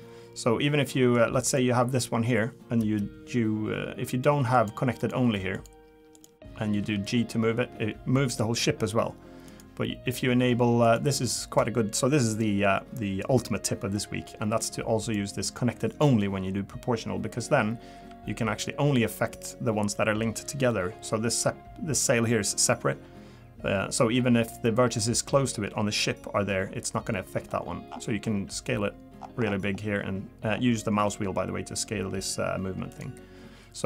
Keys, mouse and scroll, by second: 0.9 middle click, 1.5 click, 4.1 click, 4.5 click, 5.0 click, 6.8 g, 10.8 click, 15.9 click, 18.0 g.